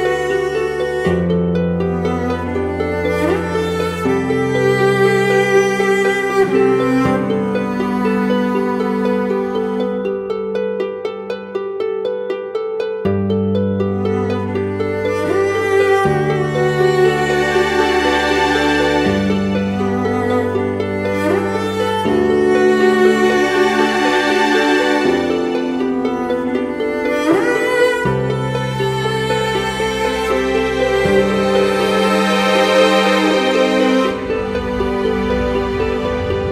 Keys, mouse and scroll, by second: 1.7 right click, 4.0 typing, 4.6 double click, 7.4 typing, 7.8 double click, 15.0 right click, 15.9 ], 16.4 ], 16.7 double click, 24.8-25.4 scroll down 1, 25.5 ctrl+click, 26.6 Right, 29.2 Right, 31.1-32.5 scroll up 1, 32.5-33.1 scroll down 1, 33.2 shift+click.